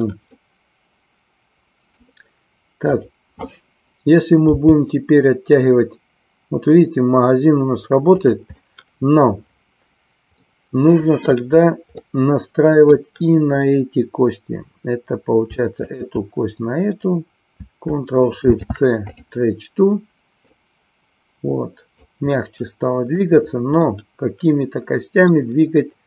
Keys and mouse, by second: 0.4-2.0 middle drag, 8.1 click, 8.7 middle click, 10.5 middle click, 12.0-13.0 middle drag, 15.8-17.0 shift+drag, 18.4 ctrl+shift+c, 20.5-22.1 drag, 22.4-23.4 middle drag, 23.9-25.5 middle drag.